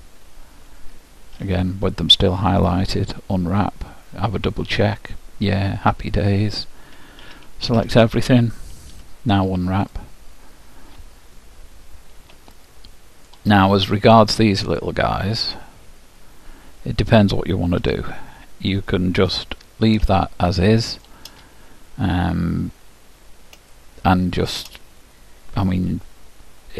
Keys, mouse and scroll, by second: 1.5 u, 3.6-6.8 middle drag, 7.4 a, 7.8 a, 9.0 u, 12.6-14.6 middle drag, 14.8-17.0 drag, 18.0 l, 19.6 scroll up 1, 20.2-22.1 middle drag, 23.8-25.7 middle drag.